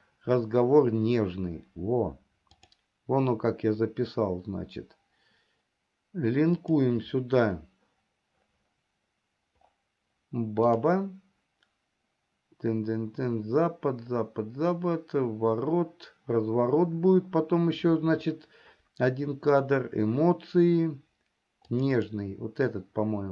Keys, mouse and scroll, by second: 2.8-7.4 drag.